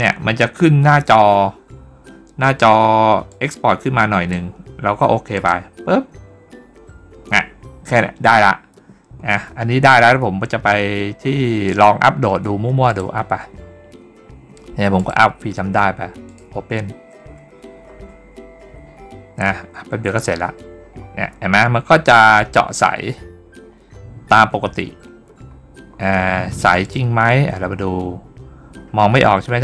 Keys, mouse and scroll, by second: 3.1-4.1 drag, 5.2 click, 11.6 click, 12.7 click, 14.8 click, 16.1 click, 17.7 scroll up 1, 20.3-21.0 scroll down 2, 23.5 scroll down 1, 25.1 scroll down 1, 25.8 scroll up 1, 25.9 scroll down 1, 26.7 click, 28.1 scroll down 1.